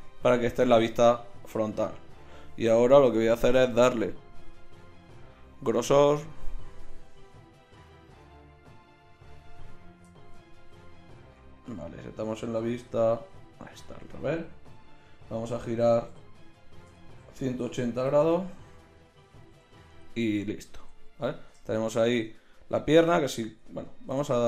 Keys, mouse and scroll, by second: 3.0-5.5 drag, 6.9-8.7 middle drag, 11.6 KP_1, 12.8 KP_3, 16.1 r, 21.1 KP_1, 22.1 Tab, 22.9 Tab, 24.1 r.